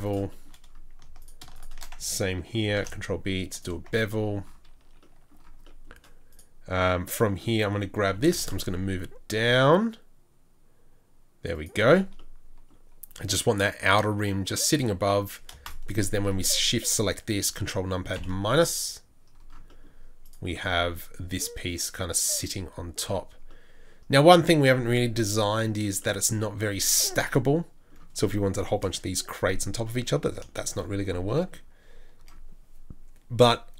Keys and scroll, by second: 2.6 ctrl+b, 3.8 ctrl+b, 3.9 Tab, 8.0 g.